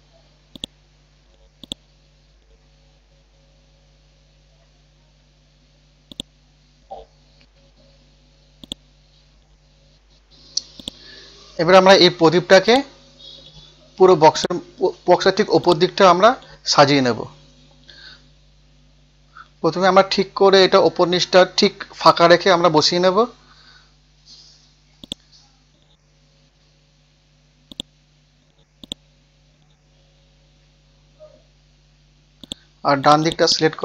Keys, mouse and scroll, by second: 0.0-0.5 scroll down 1, 0.5 click, 0.9 scroll down 1, 1.6 click, 2.5 scroll up 1, 3.1-3.6 scroll up 1, 3.8 ctrl+z, 4.7 typing, 5.0 scroll down 1, 6.1 click, 6.9 scroll down 1, 7.8 scroll up 1, 8.6 click, 9.6 scroll up 1, 10.8 shift+click, 12.2-12.7 scroll up 1, 12.7 click, 13.7-14.3 scroll up 1, 14.3 click, 15.2 ctrl+z, 15.6 click, 16.8 Down, 17.0 Down, 17.2 Down, 19.9 scroll down 1, 21.8 scroll up 1, 22.7-23.3 scroll down 1, 23.5-25.0 scroll up 1, 25.0 click, 30.1-30.9 scroll up 1, 30.9 scroll up 1, 32.4 click, 33.4-33.8 drag.